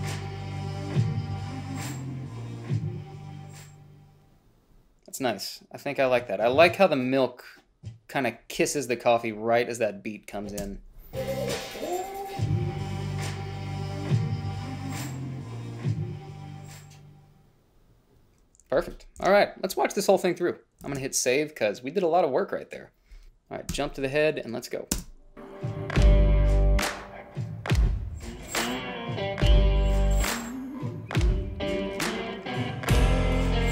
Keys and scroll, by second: 10.9 space, 19.5 shift+z, 24.0 Home, 25.2 space.